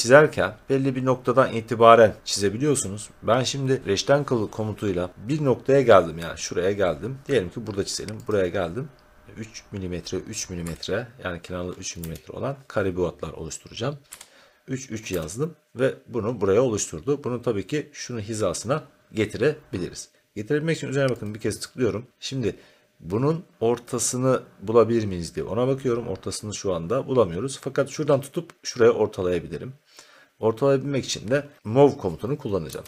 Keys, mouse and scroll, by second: 1.3-5.1 middle drag, 1.3-2.6 scroll, 8.3 click, 10.6 3, 11.9 Tab, 14.0 3, 15.1 Return, 16.2 scroll, 16.3 middle click, 21.2 click, 22.1 middle click, 22.5 middle click, 32.4-32.8 typing.